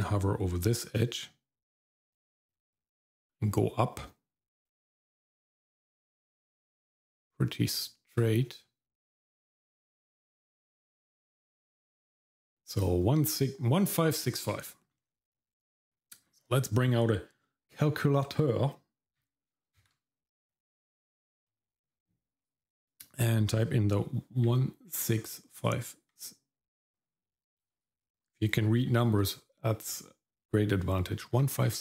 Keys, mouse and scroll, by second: 2.1-12.8 drag.